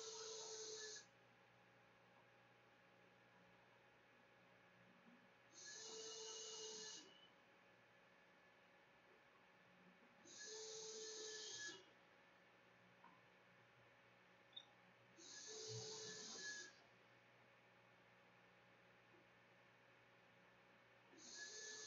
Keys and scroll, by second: 15.6-16.8 typing, 19.0 Left, 19.8 /, 19.8 Up, 20.6 Return, 20.8-21.6 typing.